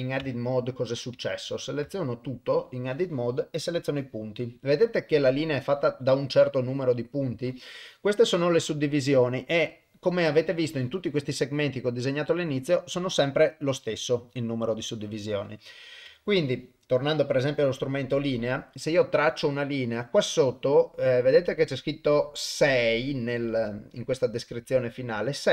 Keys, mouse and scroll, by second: 0.2 Tab, 1.9 a, 3.6 click, 16.1 Tab, 16.8 click, 19.2-25.5 drag.